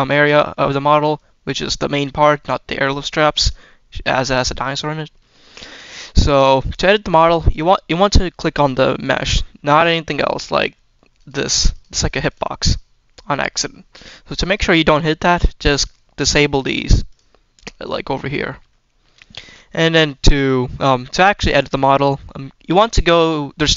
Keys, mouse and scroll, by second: 0.2 scroll down 1, 0.5-1.0 middle drag, 1.8 click, 4.5-4.9 middle drag, 5.3 shift+middle drag, 5.8 scroll up 1, 6.3 middle click, 6.9 scroll up 1, 7.3 shift+middle drag, 8.5 click, 9.2-9.6 scroll down 1, 9.6 shift+middle drag, 11.0 click, 11.6 click, 11.9 click, 12.1 click, 12.5 click, 14.3 click, 15.1 click, 16.5 click, 17.0 click, 18.6-18.9 shift+middle drag, 19.2-20.0 scroll down 1, 20.0 scroll down 1, 20.1 click, 20.8-22.1 shift+middle drag, 23.0 shift+middle click.